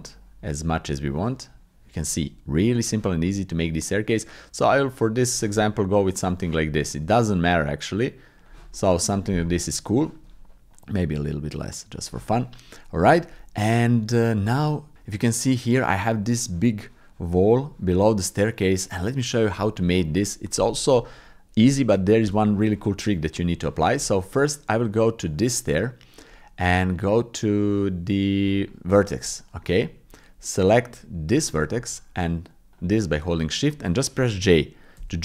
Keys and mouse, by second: 2.5 middle click, 3.6-5.4 drag, 5.6 middle click, 7.3-8.5 shift+drag, 8.7 middle click, 10.9-12.1 shift+middle drag, 12.3 middle click, 13.7 middle click, 17.3 middle click, 18.0 middle click, 18.5 click, 18.6-20.4 middle drag, 23.2 middle click, 23.6 shift+middle click, 24.1 middle click, 25.2 click, 26.2 click, 26.6 Tab, 29.6 click, 30.4 click, 32.7 shift+click, 35.0 j.